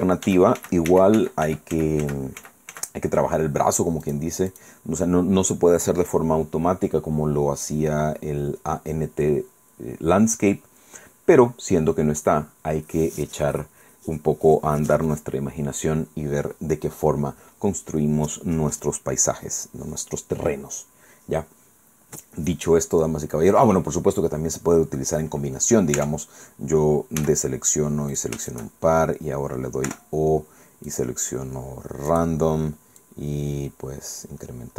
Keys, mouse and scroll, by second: 4.1 click, 4.6 click, 26.0 Tab, 27.2 a, 28.2 shift+right click, 28.5 shift+right click, 29.9 o, 30.9 click, 32.1 click, 33.0 click, 33.6-34.1 scroll down 1, 34.2 scroll down 1.